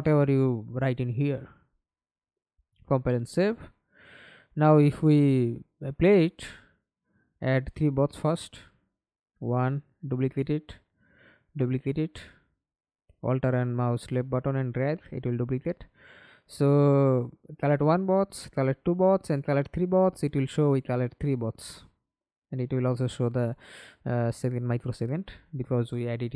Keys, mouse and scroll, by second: 1.5 double click, 2.0 double click, 2.5 middle click, 3.1-3.5 scroll down 5, 3.7 alt+click, 4.9 ctrl+space, 8.3 alt+click, 9.4 alt+click, 12.3 F11, 12.8 alt+p, 14.7-17.8 typing, 22.2-25.4 w, 25.6 w.